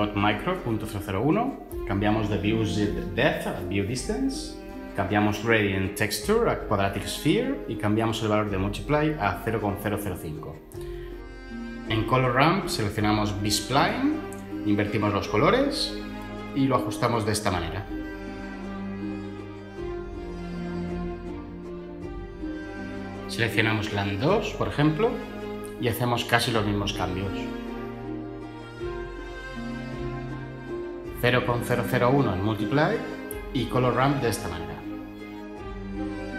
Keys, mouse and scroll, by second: 2.0 Tab, 9.4 BackSpace, 9.8 Return, 12.8 ctrl+z, 21.2 Tab, 25.1 Tab.